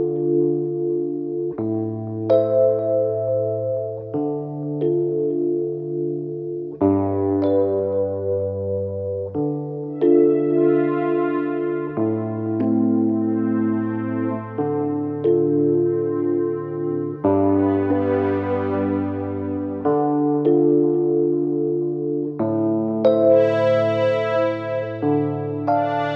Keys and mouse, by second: 1.1 g, 1.6-5.7 middle drag, 2.8 r, 5.7-12.2 drag, 10.2 x, 11.0 z, 12.1 Tab, 12.2-14.0 middle drag, 12.8 Tab, 12.9 z, 13.9 Tab, 14.0 click, 14.2-16.1 middle drag, 14.8 Tab, 15.1 a, 16.1 click, 16.2-24.8 middle drag, 18.3 z, 21.3 shift+d, 23.6 s, 24.8-25.8 drag, 25.8 middle click.